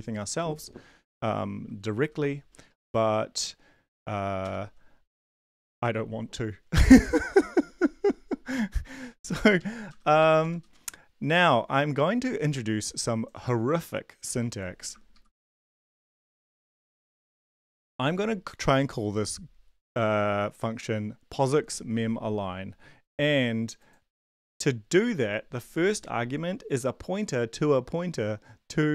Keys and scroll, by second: 1.9 typing, 2.6 Left, 4.4 Return, 9.0 Up, 9.1 Up, 9.6 Up, 9.9 Return, 10.2 Up, 10.4 Tab, 10.6 Return, 15.1 shift+Left, 15.8 ctrl+c, 16.5 shift+Tab, 17.2 BackSpace, 17.3 BackSpace, 25.2 shift+Tab.